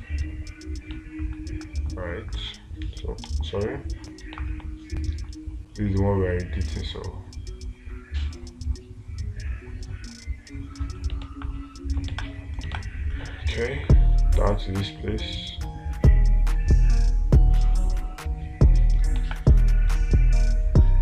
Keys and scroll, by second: 3.7 ctrl+z, 11.7 space, 13.2 space, 19.6 space.